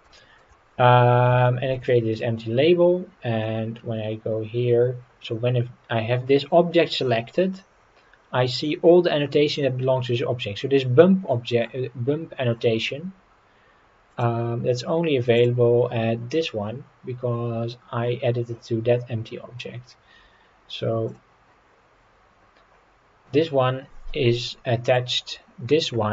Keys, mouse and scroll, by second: 0.2 shift+middle drag, 0.5-1.3 middle drag, 1.4-1.8 shift+middle drag, 1.9-3.2 scroll down 3, 3.5-4.5 scroll down 4, 14.1 click, 15.3 click, 21.1 click, 24.4-24.9 middle drag.